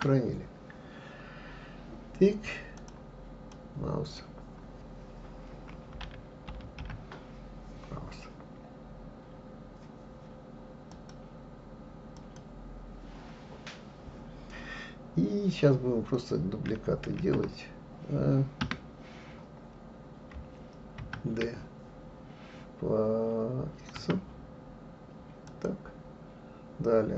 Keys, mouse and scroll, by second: 0.0 ctrl+s, 17.2 shift+s, 21.0 shift+d.